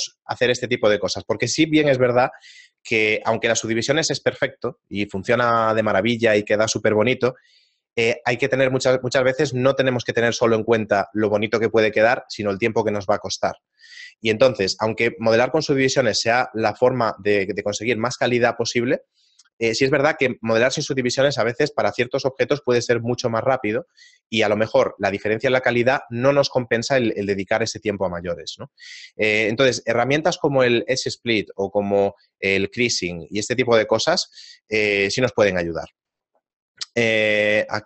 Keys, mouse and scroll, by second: 36.8 right click, 37.3 middle click.